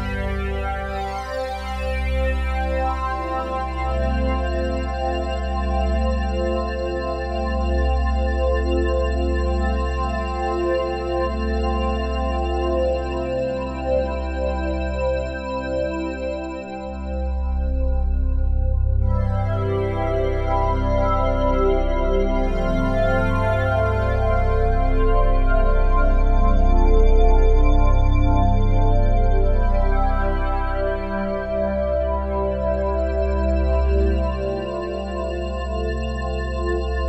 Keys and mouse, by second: 17.3 ctrl+s, 17.9 alt+a, 18.4-20.9 ctrl+alt+drag, 20.9 3, 21.6-23.7 alt+shift+drag, 23.7 Tab, 24.2-27.8 ctrl+alt+drag, 27.8 shift+s, 28.5 click, 30.1 click, 30.5 click, 31.4 ctrl+alt+click, 34.4 t, 35.4 click, 36.9 click.